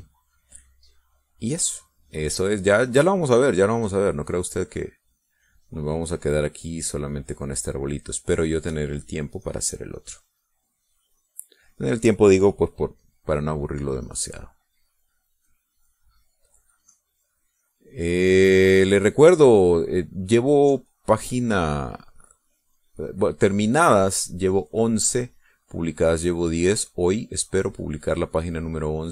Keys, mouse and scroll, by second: 0.3 middle click, 1.4-2.4 drag, 3.2-6.1 drag, 6.5-9.2 drag, 9.5 click, 10.7 middle click, 11.2-12.4 drag, 12.5 click, 14.3-16.6 drag, 17.1-22.8 drag, 22.9 middle click, 24.1 click, 25.0 click, 25.8-29.1 drag.